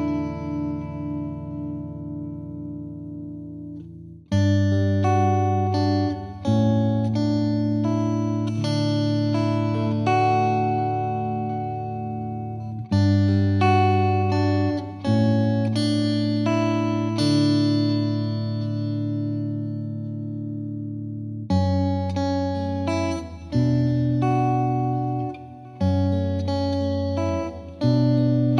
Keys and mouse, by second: 0.8 click, 5.7 click, 6.9-7.9 typing, 9.6-10.7 drag, 12.2 click, 13.5-14.6 drag, 17.6-18.6 drag, 19.2 click, 20.2 F3, 21.3 click, 22.2 click, 25.0 click, 26.6-27.6 drag.